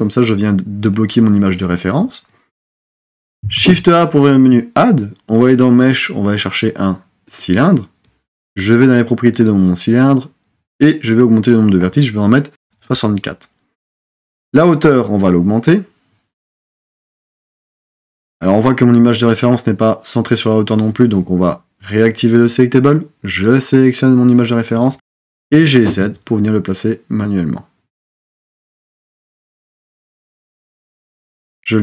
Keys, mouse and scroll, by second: 3.6 shift+a, 9.4 click, 11.1-14.3 drag, 15.0-17.9 drag, 25.5 g.